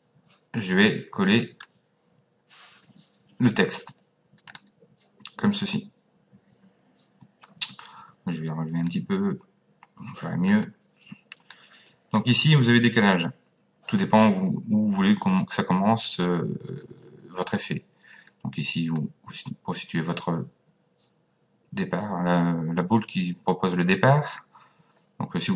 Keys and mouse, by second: 1.6 click, 8.9 click, 11.5 click, 18.9 click.